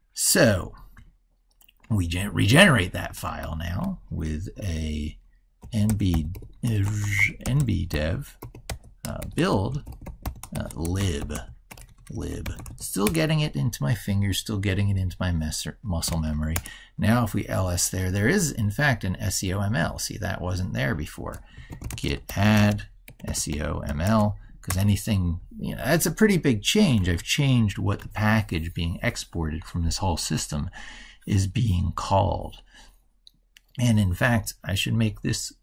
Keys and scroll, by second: 27.0 ctrl+super+Left.